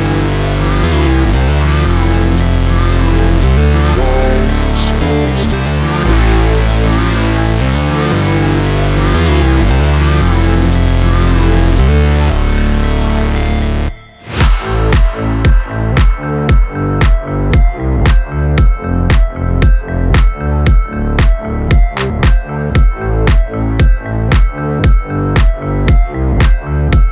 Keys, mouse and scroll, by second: 1.0 click, 3.0-6.2 drag, 6.2 Tab, 6.5 shift+click, 7.9-8.4 scroll down 3, 8.8 click, 9.4 shift+click, 13.7 ctrl+p, 17.1 click, 19.4 click, 21.6 s, 23.5 click, 24.6 g, 25.1 z, 26.2 right click, 26.6 click.